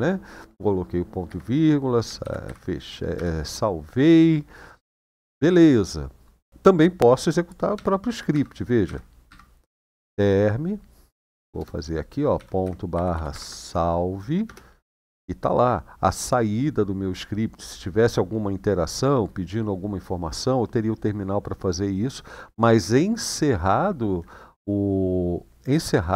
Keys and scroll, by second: 1.1 Escape, 1.9 shift+;, 2.2 w, 2.9 Return, 7.5 shift+;, 8.6 Up, 8.6 typing, 9.0 Up, 9.7-13.1 typing, 13.1 Tab, 14.2 Return.